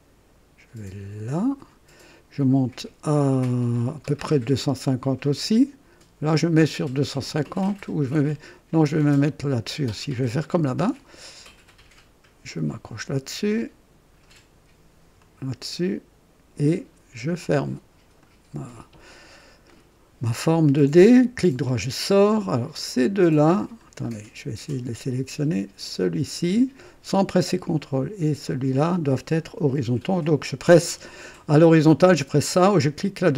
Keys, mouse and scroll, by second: 1.5 click, 10.4 click, 12.8 click, 15.2 click, 18.2 click, 19.6 right click, 21.3 right click, 22.9 click, 24.0 scroll up 2, 25.9 click, 28.4 click.